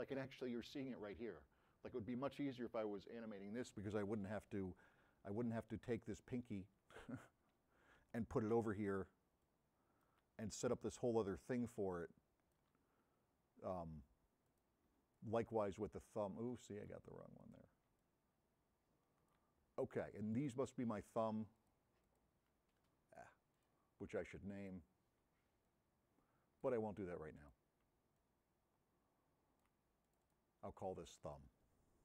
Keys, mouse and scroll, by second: 6.0 click, 9.5-10.2 drag, 9.5 m, 12.3 click, 13.2 middle click, 14.5 click, 14.9 m, 15.2-16.9 drag, 17.5 click, 18.0 m, 23.6 click, 24.7 click, 25.3 m, 25.7-26.8 drag, 28.2 m.